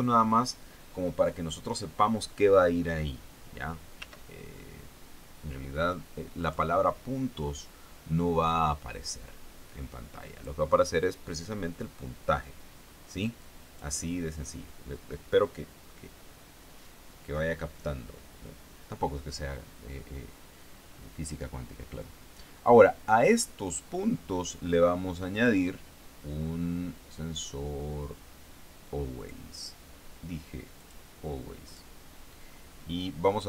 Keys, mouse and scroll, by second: 4.4 s, 6.9 click, 8.9-11.1 drag, 13.9 click, 25.8 click, 29.7 click, 31.2 click, 32.2 click.